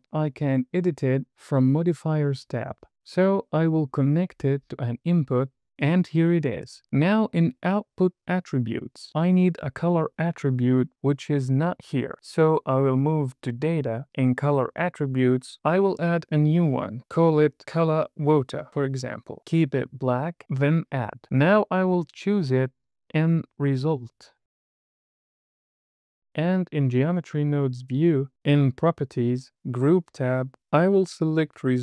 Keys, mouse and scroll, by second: 7.9 click, 8.5-11.0 drag, 13.2 click, 14.8-15.3 scroll down 1, 16.2-20.6 drag, 22.1 click, 23.4-25.6 drag, 28.0 n, 29.8 click, 31.7 click.